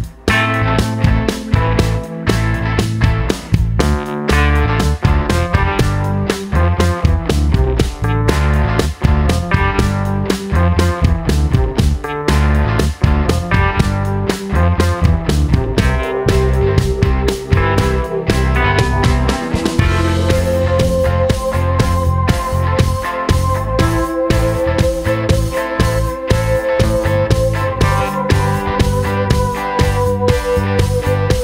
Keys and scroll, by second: 3.0 super+d, 26.8 l.